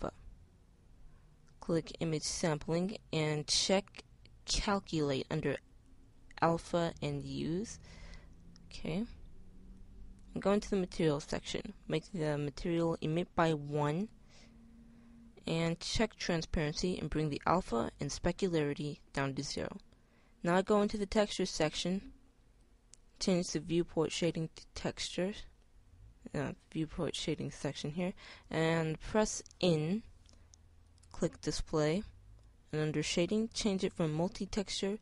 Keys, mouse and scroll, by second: 1.5 middle click, 5.2-8.6 middle drag, 10.4 middle click, 14.4-16.0 middle drag, 20.9-22.8 drag, 26.6-27.4 drag, 28.5-29.5 middle drag, 29.5 n.